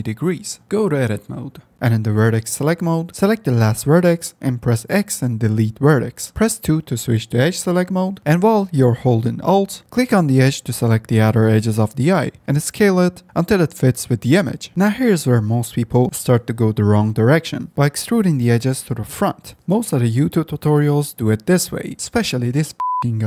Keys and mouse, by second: 0.5 g, 0.8 s, 2.1 Tab, 2.7 1, 3.0 click, 4.0 x, 10.9 2, 12.0 s, 14.8 3, 15.1 2, 15.1 e, 16.4 s, 18.0 e, 19.0 s, 20.5 g.